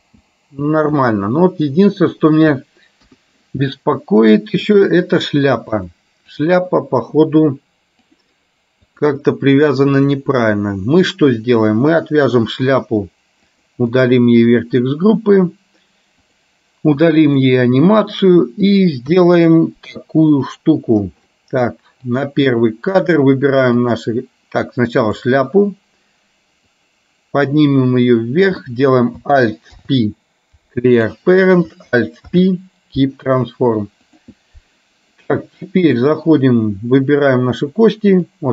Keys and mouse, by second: 0.1 space, 1.1-2.5 middle drag, 3.1 KP_1, 4.9 click, 5.9 click, 9.0 click, 13.6 click, 14.0 click, 17.4 click, 19.2 KP_3, 20.6 click, 22.4 click, 24.0 click, 25.1 click, 26.9-28.6 drag, 29.7 alt+p, 32.4 alt+p, 36.2 click, 38.2 click.